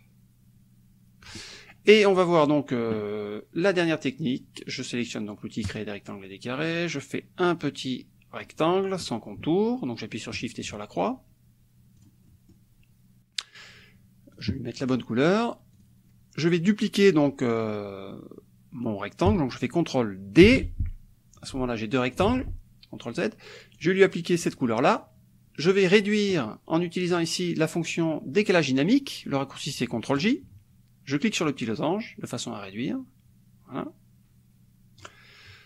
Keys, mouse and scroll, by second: 0.0-1.4 ctrl+drag, 1.6-2.7 ctrl+drag, 5.8 click, 6.8-8.6 drag, 10.3 shift+click, 12.0 click, 12.3 click, 14.3 click, 14.8 click, 15.8 click, 20.5 ctrl+d, 21.4-22.4 drag, 22.3 ctrl+z, 23.8 click, 24.5 click, 27.1 click, 30.2 click, 31.5-35.2 drag.